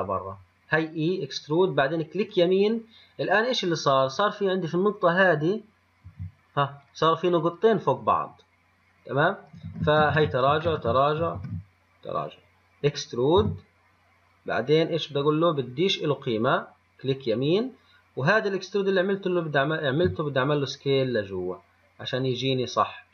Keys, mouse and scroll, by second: 4.3 click, 5.4 click, 6.3 g, 7.7 click, 9.9 ctrl+z, 10.4 ctrl+z, 10.9 ctrl+z, 11.6 ctrl+z, 13.6 e, 20.1 s.